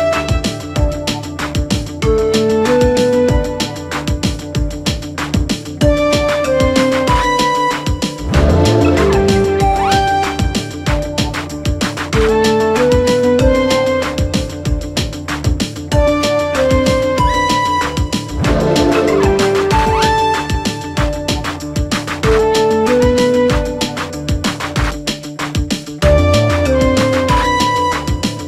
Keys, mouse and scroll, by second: 0.0-1.7 scroll up 2, 1.7-2.3 scroll down 2, 2.3-5.3 middle drag, 6.7 KP_1, 7.8 KP_3, 8.5-10.3 scroll up 2, 10.3-11.4 scroll up 1, 11.4 1, 11.8 click, 12.1-12.5 scroll up 1, 12.5-14.0 shift+middle drag, 14.0-15.0 drag, 16.9 m, 18.8-20.1 drag, 20.1 g, 20.9 click, 21.1 g, 22.0 click, 22.3 g, 24.7 click, 25.1 g, 26.6 click, 26.7 g.